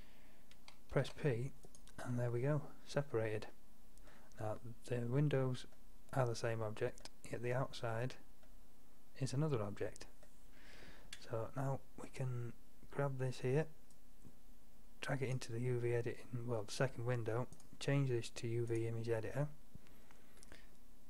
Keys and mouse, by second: 1.1 p, 5.8-7.5 middle drag, 7.5-8.5 drag, 8.5 middle drag, 14.1-14.6 drag, 14.6 middle drag, 15.0 middle drag.